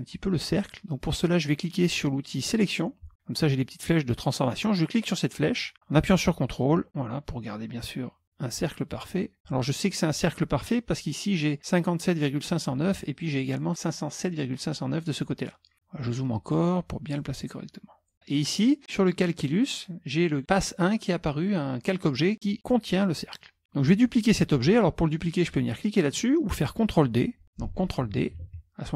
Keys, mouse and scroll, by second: 2.7 click, 5.1-9.5 drag, 11.3 click, 15.7-16.6 scroll up 1, 17.2-18.3 drag, 23.2 middle click, 28.6 ctrl+d.